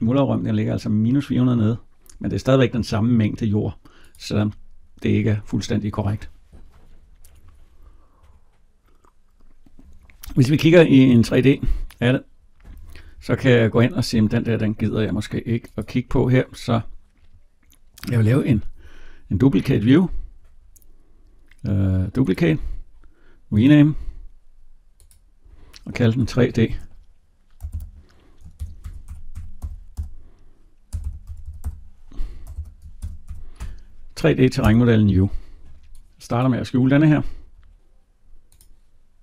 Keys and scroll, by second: 34.4 Return.